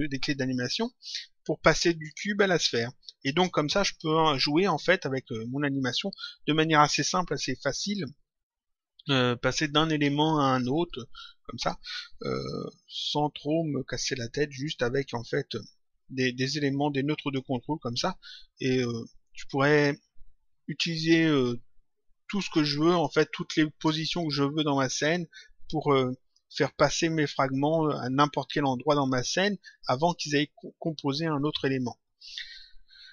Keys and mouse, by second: 4.1 click, 12.8 click, 16.3 click.